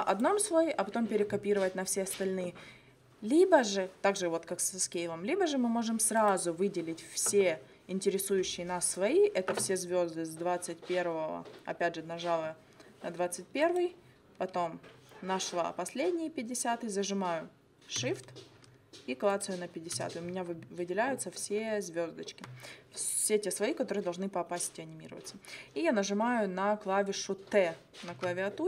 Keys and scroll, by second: 28.2 t.